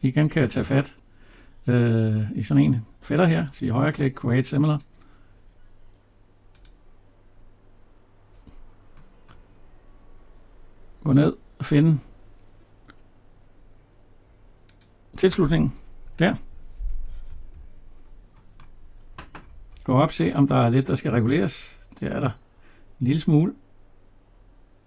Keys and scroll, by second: 15.9 Escape.